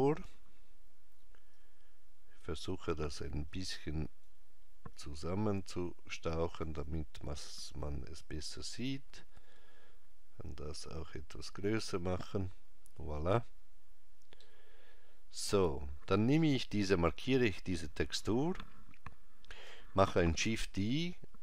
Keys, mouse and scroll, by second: 1.6-10.6 click, 13.1-13.5 scroll up 2, 14.4 middle click, 14.4-16.4 scroll up 2, 17.3 click, 20.2 shift+d.